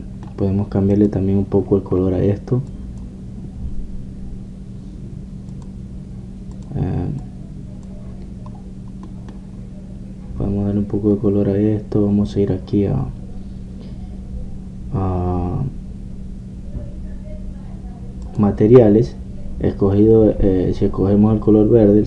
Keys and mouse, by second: 0.9 middle click, 1.3 click, 2.1-6.5 middle drag, 9.6 click, 9.9-19.3 middle drag, 19.3-22.0 drag.